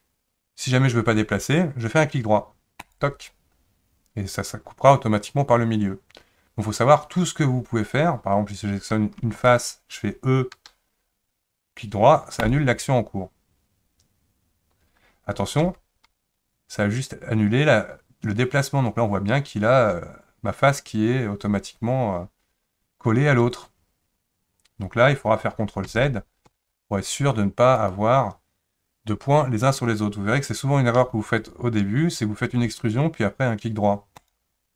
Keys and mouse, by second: 9.3 3, 9.5 click, 10.5 e, 15.6 g, 25.9 ctrl+z, 26.5 ctrl+z, 31.0 e.